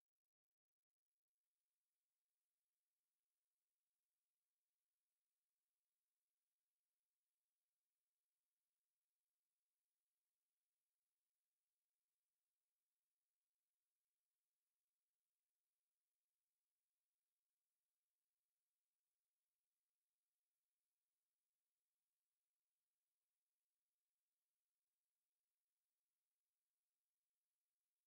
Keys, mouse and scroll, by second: 6.8-9.3 right drag, 9.3 click, 11.1 click, 14.2 click, 14.5 scroll up 2, 15.1-15.4 scroll up 1, 15.7 scroll down 2, 16.1 KP_1, 17.5 click, 18.7 r, 20.8 KP_0, 21.6 scroll up 3, 22.1-23.1 scroll down 2, 23.1 click, 23.5 click, 24.6-25.0 scroll down 2, 25.0-25.4 middle drag, 25.4 scroll down 1.